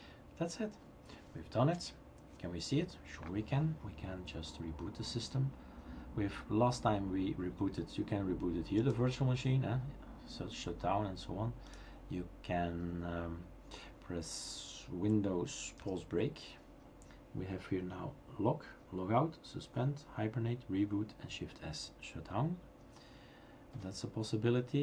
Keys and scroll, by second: 15.8 super+Pause.